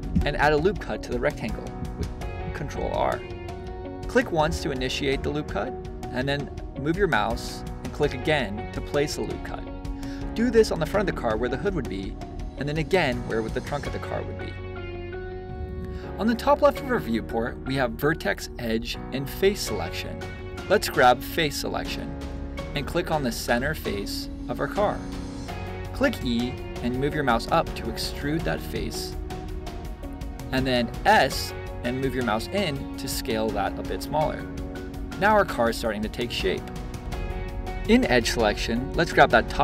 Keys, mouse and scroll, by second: 1.6 ctrl+r, 9.3 ctrl+r, 14.3 click, 19.7-21.3 drag, 22.2 shift+middle click, 32.2 click, 32.8-34.7 middle drag, 34.5 z.